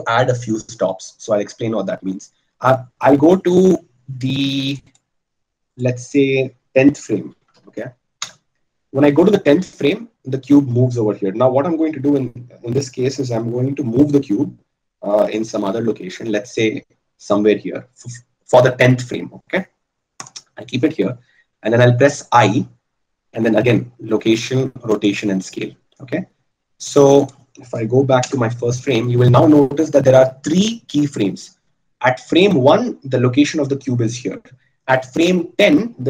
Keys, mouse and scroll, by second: 15.7 g, 23.1 i.